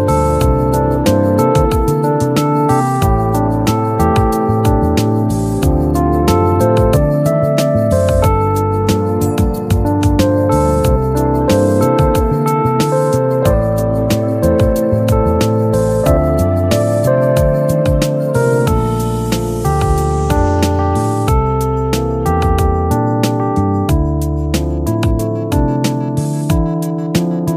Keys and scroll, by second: 8.4 ctrl+z, 15.0 ctrl+q.